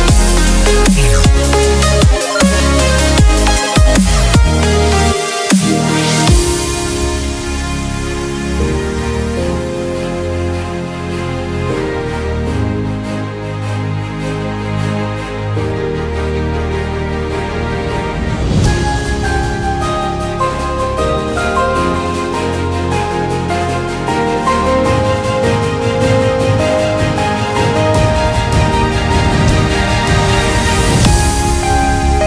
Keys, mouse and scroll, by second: 1.1-2.3 middle drag, 2.3 Tab, 3.1 a, 3.2 Delete, 3.4-3.9 middle drag, 4.1 Tab, 6.4 Tab, 6.6-7.9 middle drag, 8.0 middle click, 9.2 click, 10.6-12.2 right drag, 12.2 middle click, 12.5 middle click, 13.1 middle click, 14.7 right click, 15.5-17.5 middle drag, 17.5 right click, 18.3-19.6 middle drag, 20.3 middle click, 21.1 Tab, 22.9-24.1 drag, 24.1 shift+space, 25.0 Tab, 26.7 s, 29.5 s.